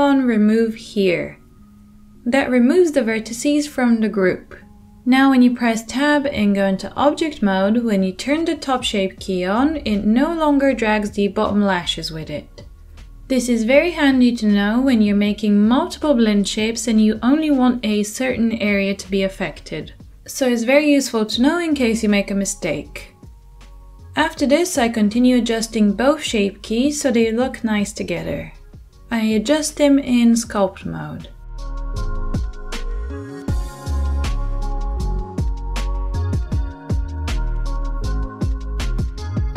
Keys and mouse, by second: 5.3 Tab, 5.3-23.4 drag, 23.4-25.2 middle drag, 23.7 Tab, 25.2-39.5 drag, 33.3 ctrl+z, 33.3 ctrl+z, 34.4 ctrl+z, 35.5 ctrl+z, 35.9 /.